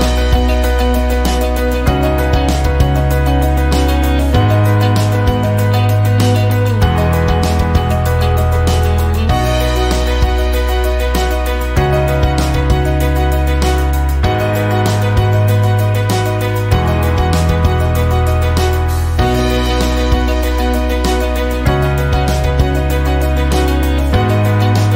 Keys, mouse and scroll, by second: 0.0-5.1 typing, 16.4 click, 17.3-18.1 typing, 20.1 click.